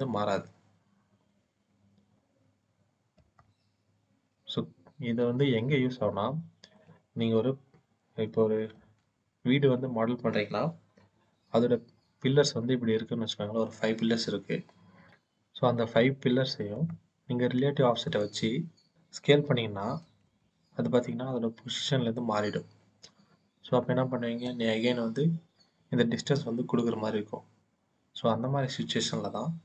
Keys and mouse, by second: 3.0 click, 5.8 middle click, 6.9 KP_1, 8.8 shift+middle click, 16.5 middle click, 18.0 click, 20.1 x, 28.6 click.